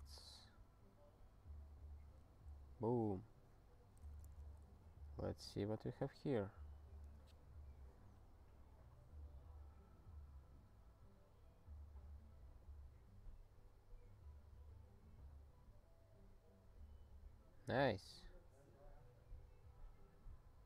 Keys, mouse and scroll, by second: 4.2 super+f, 4.8-5.3 scroll up 3, 5.6 scroll, 5.9 scroll up 1, 6.3-8.4 scroll down 1, 10.2-11.4 scroll up 1, 11.4 scroll up 3, 13.0-15.6 scroll down 3, 15.6-18.6 scroll up 3, 19.7 scroll down 3.